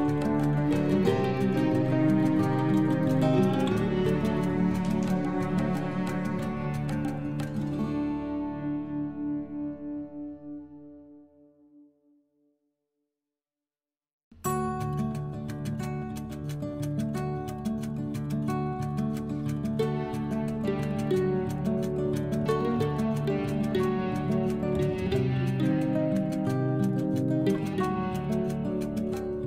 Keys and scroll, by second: 4.8 ctrl+z, 11.7 e, 15.6 Left, 17.1 ctrl+z.